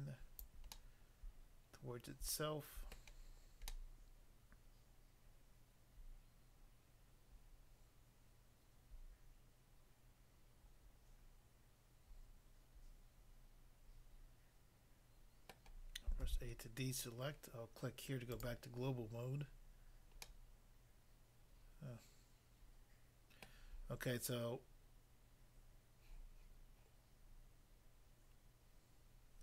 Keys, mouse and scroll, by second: 0.5 click, 0.8 middle click, 2.9 middle click, 3.7 middle click, 15.6 middle click, 16.2 a, 18.4 click, 18.4 click, 19.8 scroll down 1, 20.2 middle click, 23.4 middle click.